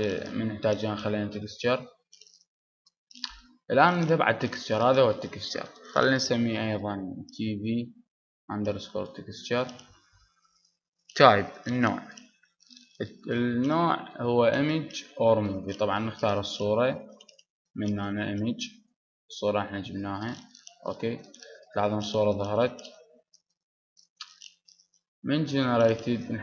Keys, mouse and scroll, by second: 20.0-21.4 drag, 21.7-23.3 drag.